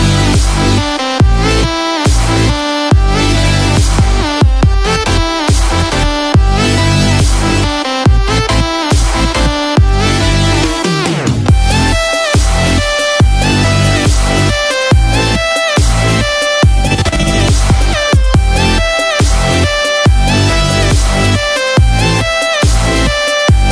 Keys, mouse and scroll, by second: 0.9 scroll down 7, 5.1 click, 5.1-5.7 scroll down 1, 8.8 middle click, 8.8 click, 8.8 scroll up 4, 9.7 click, 10.8 click, 18.6 middle click, 18.6-19.0 scroll up 8, 22.4 scroll down 1.